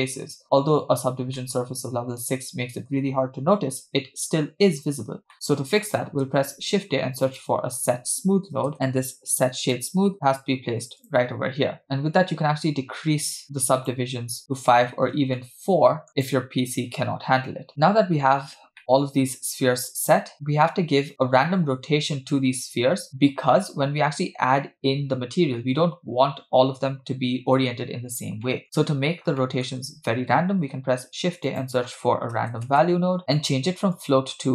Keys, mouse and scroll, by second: 0.4-0.7 scroll down 1, 0.8-1.3 scroll up 1, 1.4-2.9 shift+middle drag, 4.1-4.5 scroll down 1, 5.3 scroll down 2, 5.8 middle click, 6.4 shift+a, 11.8 click, 13.8 click, 14.4-15.2 scroll up 2, 15.2 scroll down 1, 15.4 shift+middle click, 16.1 click, 18.8-19.7 middle drag, 20.3-21.1 scroll down 2, 28.5 middle click, 28.6-29.4 scroll up 2, 29.4 middle click, 30.6 shift+a, 34.0-34.5 drag.